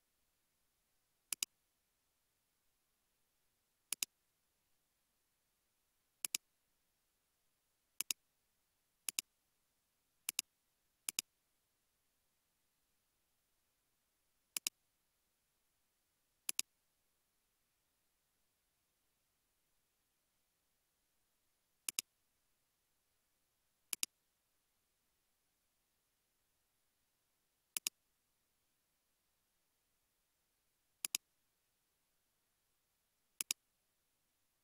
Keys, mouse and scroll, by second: 2.2 space, 2.9 space, 7.0 scroll up 1, 15.0 scroll down 1, 15.5 space, 20.9 space, 25.6 space, 26.0 space, 26.9 space, 27.2 space, 30.5 space, 31.8 space, 32.5 space.